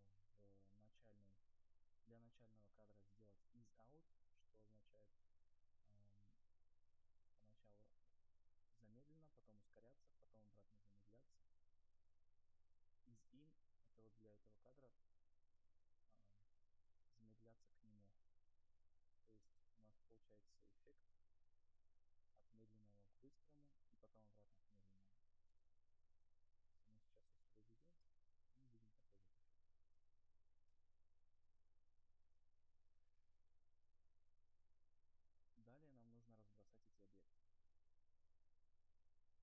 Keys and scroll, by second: 25.8 space, 28.4 0.